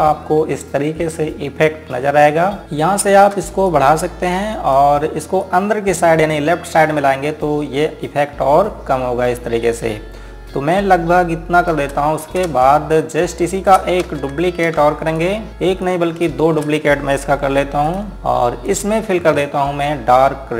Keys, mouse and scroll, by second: 0.9 click, 2.6 ctrl+Num_Lock, 2.9 z, 4.4 click, 6.2 click, 13.7 click, 14.8 space, 15.5 click, 16.7 right click, 18.1 click, 18.7-19.4 scroll up 1, 19.4 click.